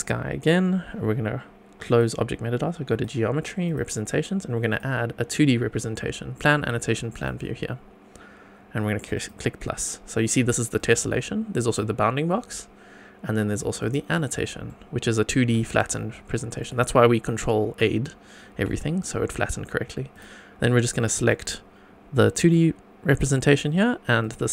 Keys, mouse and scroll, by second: 1.8 click, 2.9 click, 3.6 click, 4.7-7.2 drag, 9.1 click, 10.7 click, 11.6 click, 13.7 click, 14.7 middle click, 15.5 shift+middle drag, 16.0 scroll up 1, 16.3 shift+middle click, 17.8 middle click, 18.8 shift+middle click, 20.1 click, 21.1 click, 24.2 shift+click.